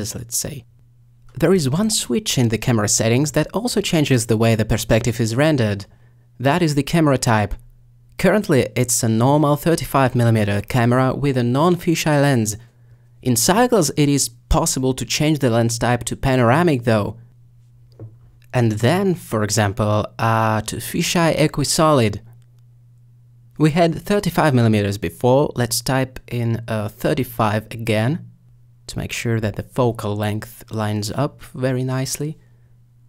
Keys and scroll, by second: 29.0-29.3 typing.